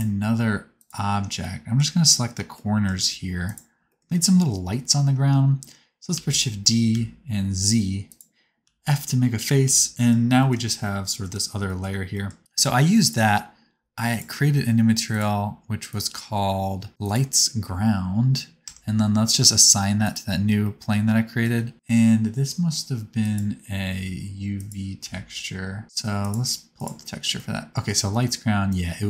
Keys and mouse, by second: 1.3-3.4 middle drag, 3.6-5.4 shift+middle drag, 6.2 shift+d, 8.6 f, 9.7 Tab, 9.9 alt+z, 11.5-15.1 shift+middle drag, 15.1-25.1 drag, 18.6 Tab.